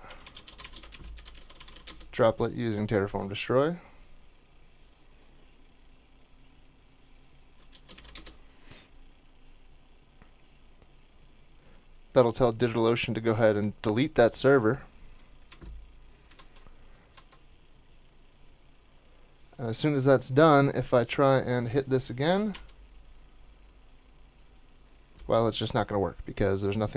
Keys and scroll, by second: 0.0-2.4 typing, 7.5-8.4 typing, 16.3 super+Tab, 17.1 super+Tab, 22.5 super+r.